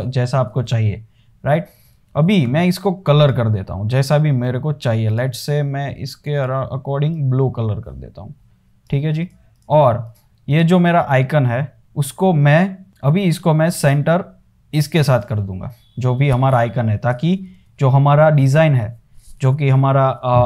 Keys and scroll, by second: 17.8 space, 18.7 super+z.